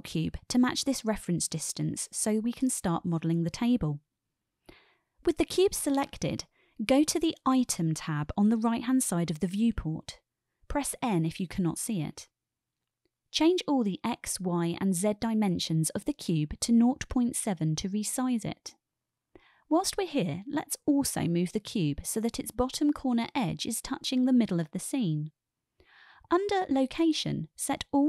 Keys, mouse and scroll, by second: 6.0 click, 9.0 click, 10.8 n, 11.7 n, 14.1-18.9 drag, 24.3 KP_Decimal, 25.0-25.4 middle drag, 26.3-27.2 middle drag.